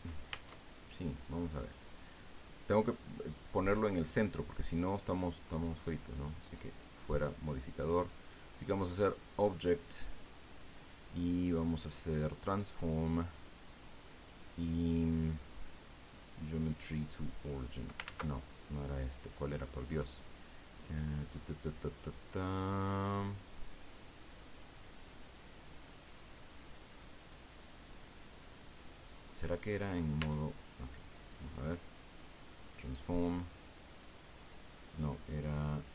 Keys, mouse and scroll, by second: 0.3 Tab, 2.2 click, 6.1 click, 7.8 click, 17.1 click, 18.0 ctrl+z, 19.0 click, 30.2 Tab, 31.4 click.